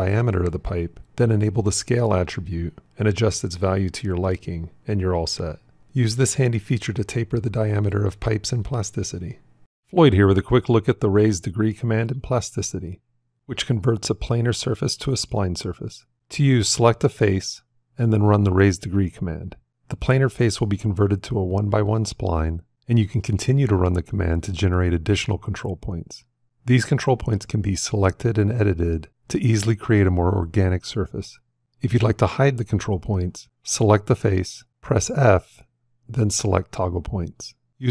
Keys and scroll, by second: 17.7 f, 22.7 shift+s, 28.3 g, 29.6 r, 35.5 f.